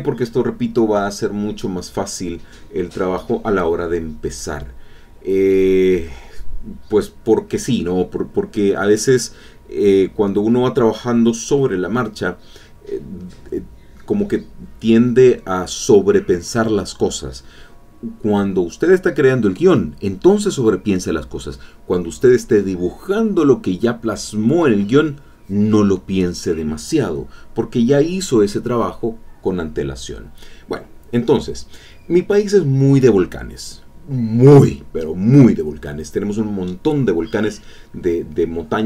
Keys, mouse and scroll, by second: 3.7 click, 6.2 middle click, 17.4 middle click, 23.2 middle click, 24.0 middle click, 25.5 middle click, 26.8-33.2 drag, 33.6-36.5 drag, 38.3-38.8 drag.